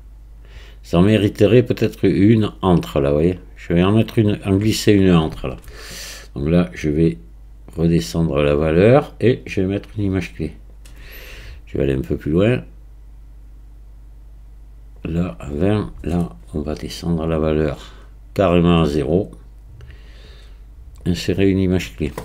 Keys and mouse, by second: 6.9-8.8 drag, 9.4-10.8 right drag, 12.4 click, 12.5 right click, 17.3-18.6 right drag, 19.8-21.1 drag.